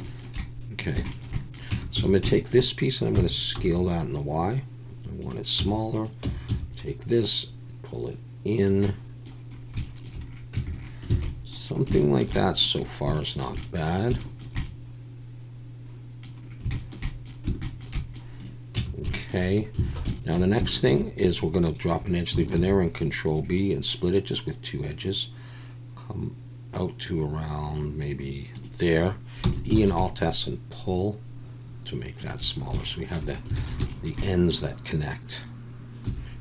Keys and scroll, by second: 1.7 Tab, 2.0 a, 3.1 s, 3.6 y, 5.6 Tab, 6.2 Tab, 6.5 a, 10.5 Tab, 11.2 alt+a, 18.7 Tab, 19.8 alt+a, 20.9 ctrl+r, 22.6 ctrl+b, 29.4 e, 29.9 alt+s, 33.6 alt+a, 36.0 2.